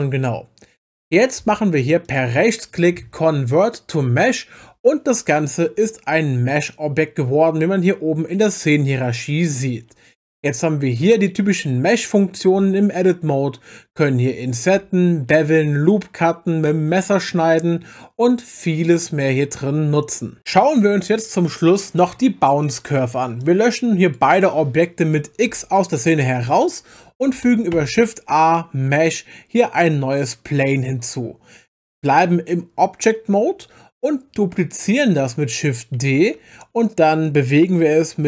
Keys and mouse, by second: 2.0-4.3 right drag, 8.9 click, 12.6 Tab, 23.4 click, 25.5 x, 27.7 shift+a, 32.1 Tab, 36.0 shift+d.